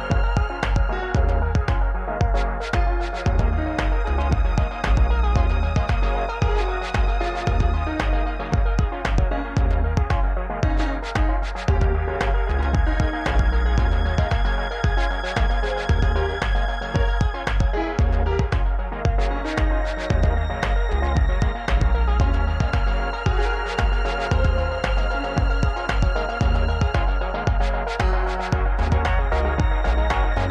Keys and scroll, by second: 0.9 2, 1.8 alt+z, 2.9 x, 4.3 alt+z, 5.3 alt+z, 8.2 Tab, 11.0 Tab, 11.7 2, 12.1 g, 13.6 Tab, 14.0 KP_7, 17.4 ctrl+z, 25.5 ctrl+p, 27.5 ctrl+p.